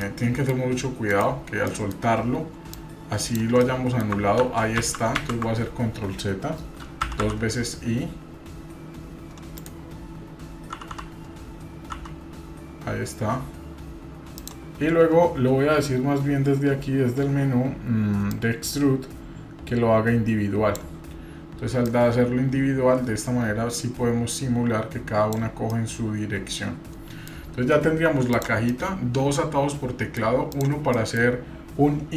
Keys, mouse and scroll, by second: 1.6 middle click, 2.7-3.4 drag, 3.6 middle click, 4.4 ctrl+z, 18.3-20.8 drag, 21.8-25.7 drag, 25.7-27.2 middle drag, 27.6 Tab, 28.3 click, 28.7-30.2 middle drag, 30.5 click, 31.0 middle click.